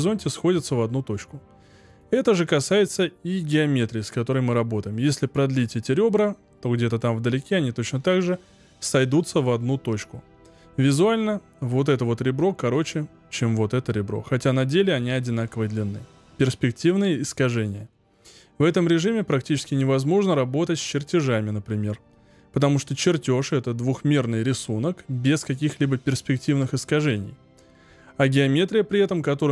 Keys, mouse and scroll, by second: 1.8 click.